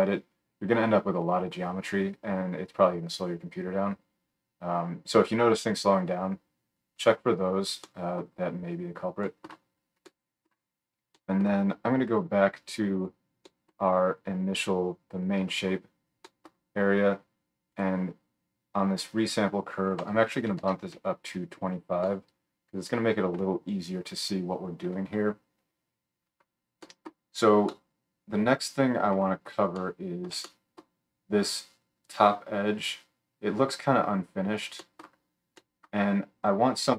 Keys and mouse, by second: 7.8-17.8 middle drag, 9.0 click, 9.0 right click, 11.1 click, 11.1 right click, 11.3 drag, 11.3 right drag, 17.8-19.2 drag, 19.2-36.9 middle drag, 33.6-34.4 drag, 33.6-34.4 right drag, 34.5 drag, 34.5 right drag.